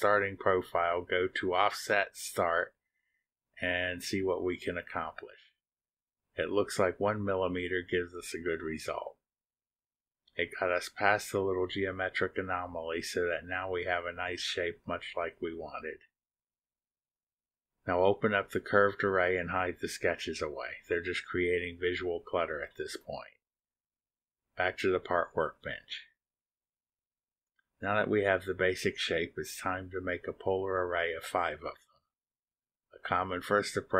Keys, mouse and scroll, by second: 2.3 click, 4.2 click, 6.2 click, 7.0 click, 13.0 click, 16.2 click, 17.7 click, 18.6 click, 19.0 click, 19.3 middle click, 19.4-19.9 scroll down 2, 21.1 click, 21.5 click, 21.9 shift+click, 22.7 space, 24.9 click, 26.5 click, 32.5 click.